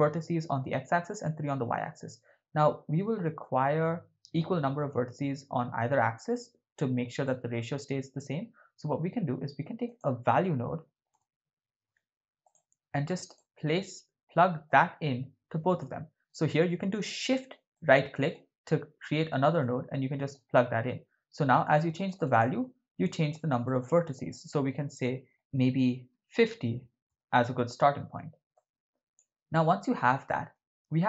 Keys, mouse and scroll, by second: 3.4 middle click, 7.3 middle click, 8.7 shift+a, 14.7-15.8 drag, 17.7 shift+right click, 19.6-20.3 drag, 21.6 click, 22.0 click, 22.2 click, 23.6-27.1 drag, 28.7-29.2 drag, 29.5 middle click, 30.3 ctrl+middle click.